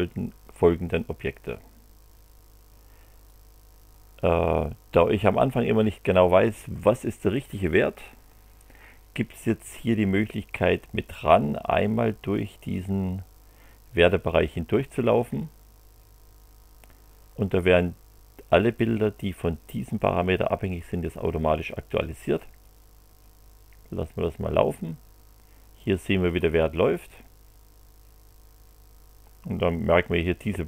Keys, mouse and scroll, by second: 3.2 click, 22.6 click.